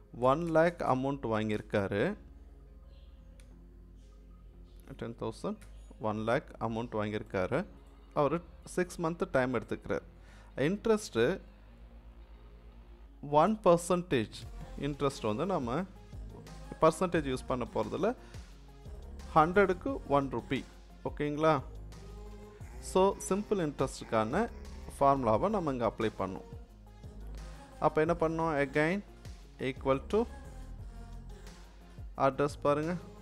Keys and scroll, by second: 0.0-1.0 typing, 3.4 BackSpace, 5.6 0, 13.5 1, 29.5 =.